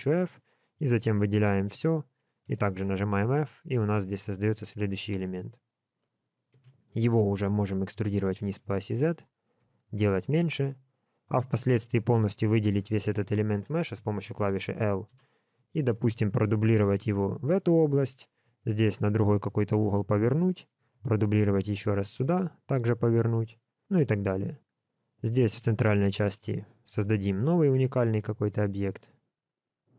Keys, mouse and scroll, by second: 0.3 shift+click, 0.6 shift+click, 0.9 shift+click, 1.6 shift+click, 2.4 f, 6.5 KP_1, 7.5 e, 11.1 middle click, 15.1 KP_7, 15.6-16.1 scroll down 4, 16.1 shift+middle click, 17.1 shift+d, 18.6 r, 20.8 shift+d, 22.2 r, 25.2 click, 25.8 shift+middle click, 26.2-26.8 scroll up 2, 27.2 shift+d, 28.8 ctrl+right click, 29.3 ctrl+right click.